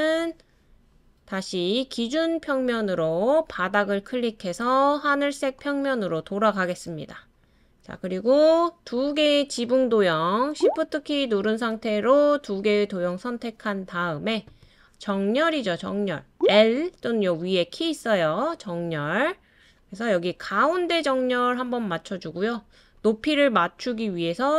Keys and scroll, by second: 16.3 l.